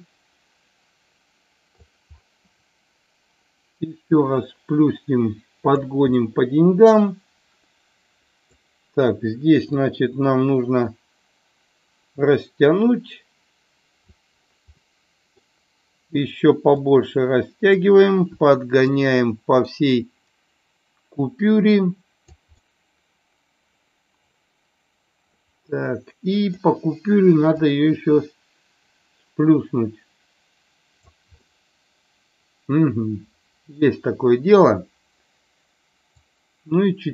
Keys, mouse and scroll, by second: 4.1-5.7 drag, 6.2 middle click, 6.5 middle drag, 7.1 middle click, 7.5-8.6 middle drag, 9.7-14.1 drag, 14.7 middle click, 16.9 click, 19.0-22.4 drag, 22.6-26.5 middle drag, 27.5-31.0 drag, 31.6-33.7 middle drag, 36.1-37.1 drag.